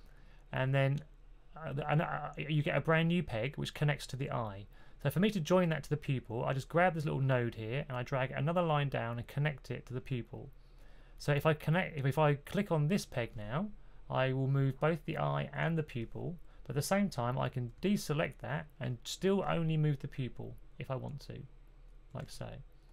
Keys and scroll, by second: 17.7 super+z, 22.1 super+z.